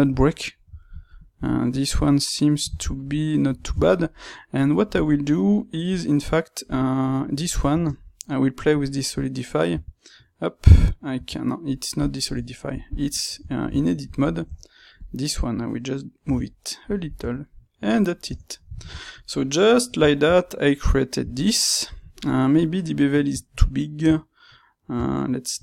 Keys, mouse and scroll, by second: 7.1-8.8 drag, 8.8 space, 12.3 Tab, 12.9-14.9 middle drag, 14.4 Tab, 14.9-16.2 drag, 16.2 g, 17.2 Tab, 17.8-23.5 middle drag, 18.2 Tab, 23.6 middle click, 23.8-25.6 middle drag.